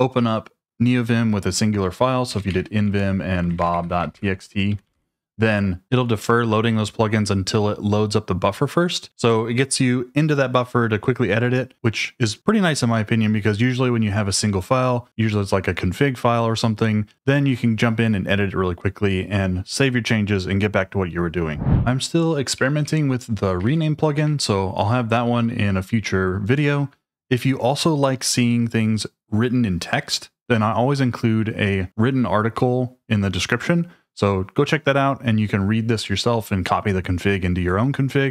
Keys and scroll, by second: 2.0-5.4 typing, 22.6-23.6 typing, 24.1 Escape.